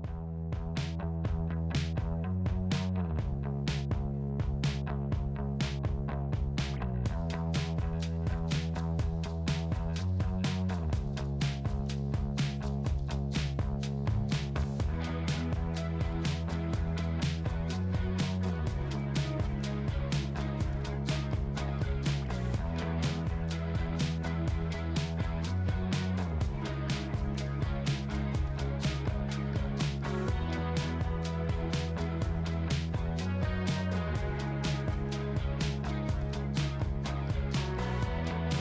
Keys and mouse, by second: 3.7 click, 7.1 click.